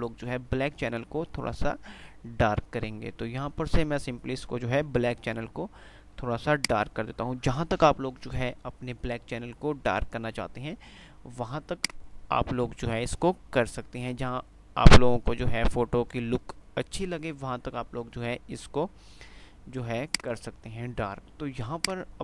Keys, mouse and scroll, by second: 6.7-7.7 drag, 11.8-13.2 drag, 20.2 click.